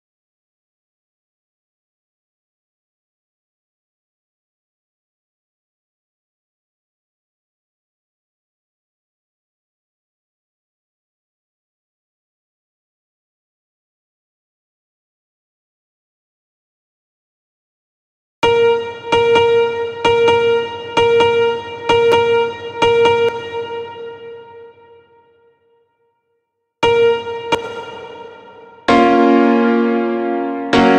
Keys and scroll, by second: 8.1 space, 22.7 space, 26.2 space, 28.3 space.